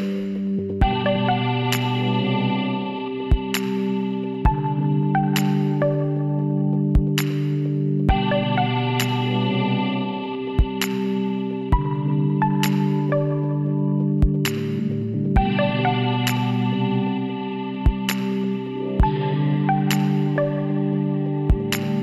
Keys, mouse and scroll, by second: 3.9 b, 5.8 s, 9.8-11.5 right drag, 10.8 b, 13.5 s, 17.2-18.9 drag, 19.8-21.5 right drag, 20.7 b.